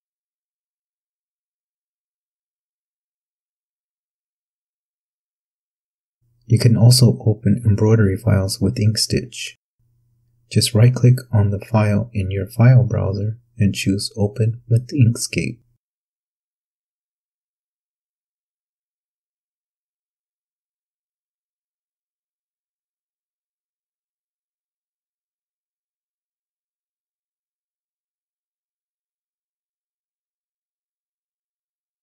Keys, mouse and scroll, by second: 3.4 click, 7.7 click, 8.8 click, 11.8 right click, 13.7 click, 18.5 click, 20.8-21.4 ctrl+scroll up 2, 22.0 ctrl+click, 23.7 n, 25.9-26.5 ctrl+scroll up 2, 27.2 ctrl+click, 28.1-28.6 ctrl+scroll down 2, 29.8-31.7 ctrl+drag.